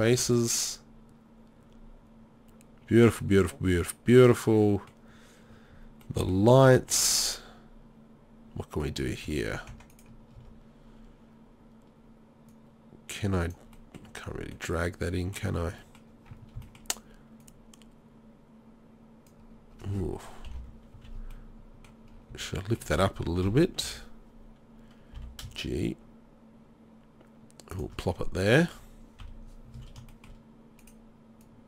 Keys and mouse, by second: 0.2 z, 1.4 middle click, 1.6 middle click, 1.9 middle click, 2.4 middle click, 4.6 middle click, 6.1 middle click, 8.8 middle click, 9.7 Tab, 10.4 Tab, 13.9 middle click, 20.5 ctrl+l, 20.9 z, 22.2-23.3 middle drag, 22.3 z, 23.4 KP_3, 23.8 KP_1, 25.2 g, 28.1-29.2 drag, 29.2 KP_3, 29.7 z, 31.4-31.6 middle drag.